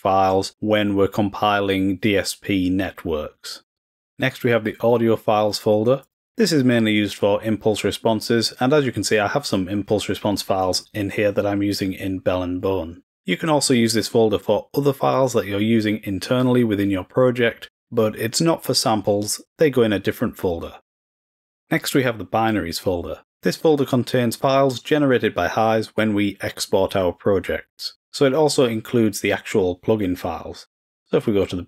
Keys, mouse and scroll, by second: 6.0 click, 22.4 click.